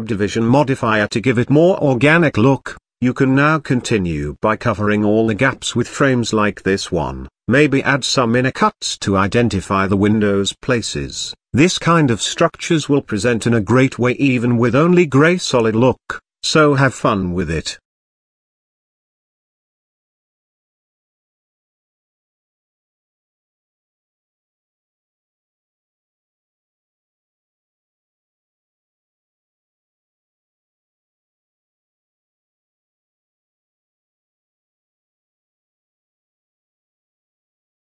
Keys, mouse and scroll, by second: 0.6-1.0 scroll up 2, 1.8 g, 3.6 click, 4.7 click, 5.4 g, 6.6 click, 7.4-8.0 middle drag, 8.0-8.5 scroll up 2, 8.9 click, 9.6 g, 13.1 s, 16.0 scroll down 1, 16.2 drag, 16.4-17.4 middle drag, 17.4 scroll down 1, 17.6-19.3 middle drag, 19.3 click, 19.8-21.6 middle drag, 21.6 scroll down 2, 21.8-26.6 middle drag, 26.6-28.6 drag, 29.6-31.4 shift+middle drag, 31.4 click, 31.9-34.0 middle drag, 34.4 scroll down 4, 35.4 shift+a, 35.6-36.0 middle drag, 36.0 s, 36.5 s, 37.4 g.